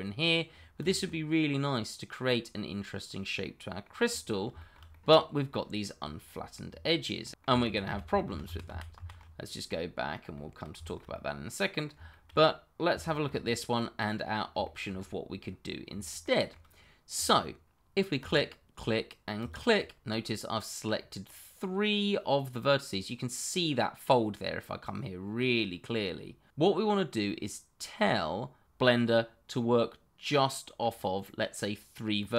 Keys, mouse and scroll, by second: 0.4-0.8 scroll down 1, 0.8 click, 1.0 middle click, 2.7 middle click, 4.0-4.5 scroll up 1, 4.5 shift+middle click, 4.7 middle click, 7.6 ctrl+z, 9.4 middle click, 10.8 shift+middle click, 10.9 middle click, 12.2 shift+middle click, 12.5 middle click, 13.3 shift+middle click, 13.5-14.2 scroll up 1, 14.2 middle click, 15.0 shift+middle click, 15.1-15.9 scroll up 1, 15.9-16.2 scroll, 16.2 shift+middle click, 16.3 middle click, 17.2 shift+middle click, 17.8 click, 18.2 click, 19.4 click, 20.9 middle click.